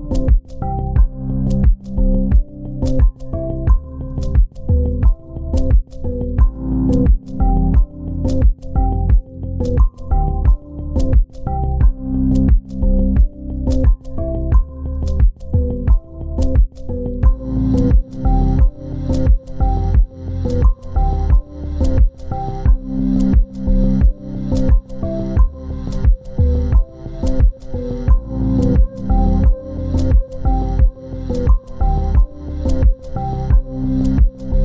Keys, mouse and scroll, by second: 25.7 double click, 27.2 ctrl+g, 27.7 shift+click, 28.3 c, 29.2 double click.